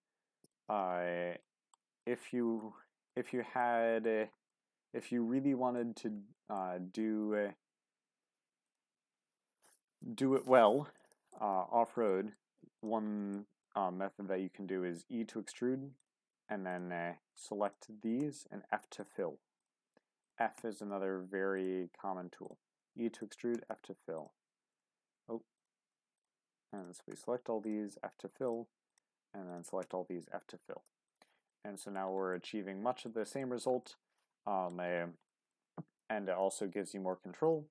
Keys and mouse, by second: 1.4 middle click, 2.0 shift+middle click, 2.4 middle click, 3.6 shift+middle click, 4.5-5.8 middle drag, 6.3 shift+middle click, 8.6 click, 10.1 shift+middle click, 11.0 shift+middle click, 12.1 shift+middle click, 13.3 shift+middle click, 14.2 e, 16.0 click, 16.7 shift+click, 18.2 f, 19.0 click, 20.2 shift+click, 20.6 f, 21.8 e, 22.4 click, 23.1 shift+click, 23.5 f, 27.1 f, 28.9 shift+click, 31.5 middle click, 32.3 middle click, 33.4 shift+middle click, 33.8 middle click, 35.3 shift+middle click.